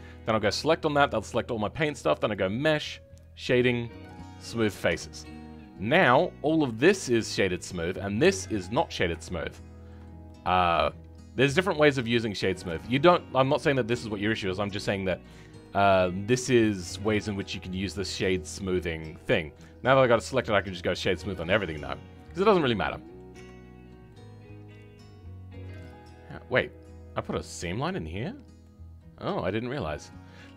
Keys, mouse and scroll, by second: 4.8 Tab, 5.2-12.3 middle drag, 12.3-12.7 scroll down 2, 12.7-17.1 shift+middle drag, 17.1-17.4 scroll up 2, 17.4-20.4 middle drag, 20.4 right click, 20.9-23.3 middle drag, 23.3 Tab, 23.6-24.0 scroll up 1, 24.0-26.0 middle drag, 26.0 scroll down 2, 26.2-28.2 middle drag, 28.2 scroll up 2, 28.5-30.5 middle drag.